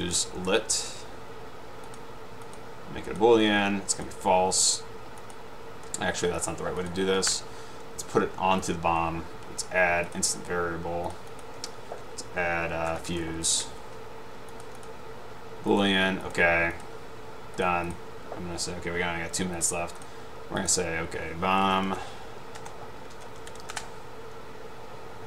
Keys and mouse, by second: 0.0-1.1 typing, 3.2 click, 4.0-4.4 drag, 5.4-5.8 drag, 6.5 click, 6.9 click, 7.5 Delete, 8.7 click, 11.5 click, 13.0-13.9 typing, 14.7 click, 15.8 click, 16.3 click, 18.0 click, 19.7 click, 21.7-24.1 typing.